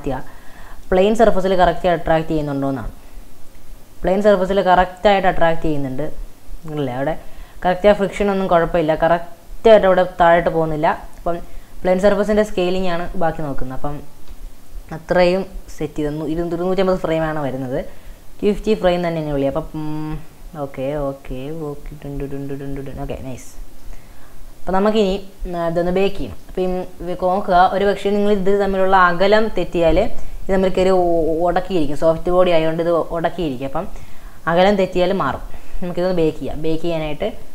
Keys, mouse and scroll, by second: 14.4 space, 16.3 Right, 18.1-21.1 drag, 23.8-26.0 middle drag, 26.0 click, 26.4 shift+middle click, 27.4 shift+scroll up 1, 27.6-30.7 shift+middle drag, 34.1 Right.